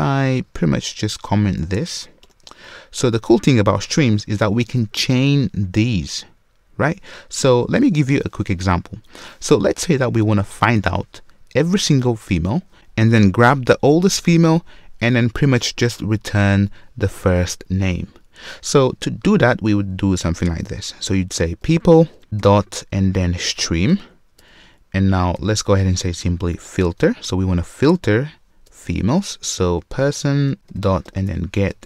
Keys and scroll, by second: 2.2 super+/, 22.1 Return, 24.0 Return, 30.5 super+z.